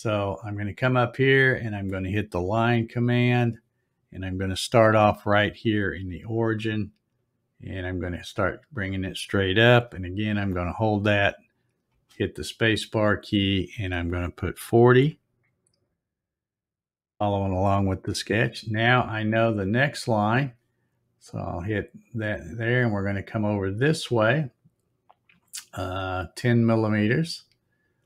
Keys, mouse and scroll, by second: 3.2 click, 7.2-12.4 drag, 11.9 space, 22.0 click.